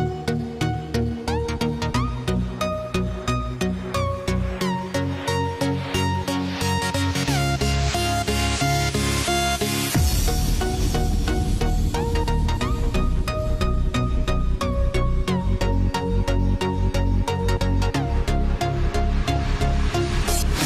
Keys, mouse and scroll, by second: 2.8 click, 5.9 ctrl+t, 7.1-14.0 drag, 17.3 click, 17.3 click.